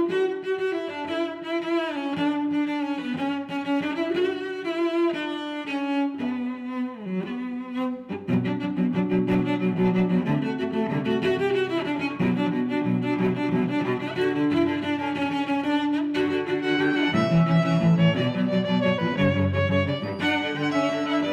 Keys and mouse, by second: 0.5 click, 2.3 shift+e, 2.8 z, 6.0 click, 6.4 middle click, 10.8 middle click, 11.7 middle click, 12.9 e, 13.1 s, 15.6 click, 16.0 middle click, 17.4 1, 18.4 click, 18.9 click, 19.1 middle click, 20.5 click.